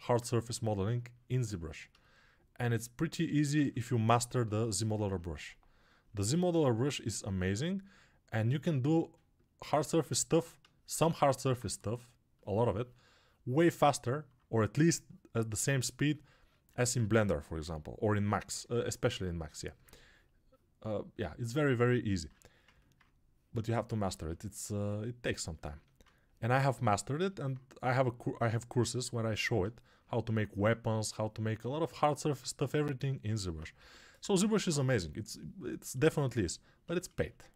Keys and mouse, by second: 11.5 2, 17.0 1, 17.5 [, 30.5-33.2 ctrl+right drag, 33.7 g, 34.1 ], 37.3-37.5 alt+drag.